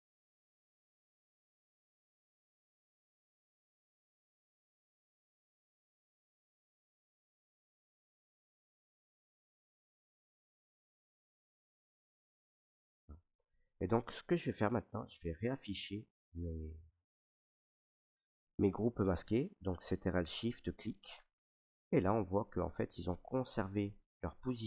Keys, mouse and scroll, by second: 0.7 click, 0.9 click, 1.1 ctrl+right click, 1.2 ctrl+right click, 1.4 right click, 1.6 alt+right click, 1.9 ctrl+right click, 2.3 right click, 2.5 alt+right click, 2.7 ctrl+right click, 3.1 alt+right click, 3.6 right click, 3.8 alt+right click, 4.2 right click, 4.4 click, 4.4 alt+right click, 4.8 click, 5.0 ctrl+right click, 5.2 alt+click, 5.4 ctrl+click, 5.6 alt+click, 6.1 ctrl+right click, 6.2 click, 6.5 click, 6.7 ctrl+right click, 6.9 alt+right click, 7.4 click, 7.8 click, 9.1 click, 9.3 right click, 9.8 click, 10.5 right click, 11.1 click, 11.6 click, 12.2 click, 13.0 right click, 13.4 ctrl+right click, 14.6 right click, 15.8 ctrl+right click, 16.3 alt+right click, 17.1 right click, 17.7 alt+right click, 20.7 right click, 22.2 click, 23.0 right click, 23.8 right click, 23.9 alt+right click, 24.4 alt+right click.